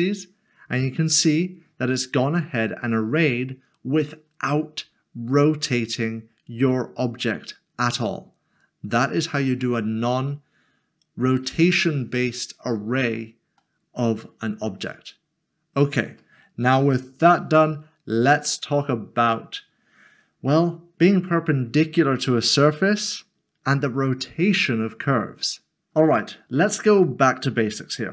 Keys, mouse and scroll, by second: 1.0 middle click, 17.3 shift+middle click, 25.8 click, 27.0 shift+middle click.